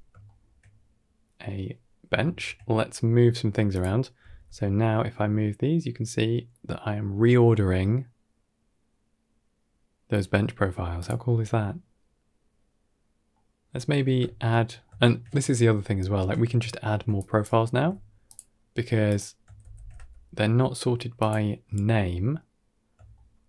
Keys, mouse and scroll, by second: 0.1 shift+middle click, 0.6 middle click, 2.1 shift+middle click, 3.6 click, 4.1 g, 11.2-12.1 middle drag, 14.1 shift+middle click, 14.4 middle click, 14.8 shift+middle click, 15.5 middle click, 16.2 shift+middle click, 17.0 click, 17.6 g, 18.9 click, 19.5 shift+d, 21.5-22.8 middle drag, 23.0-23.4 shift+middle drag.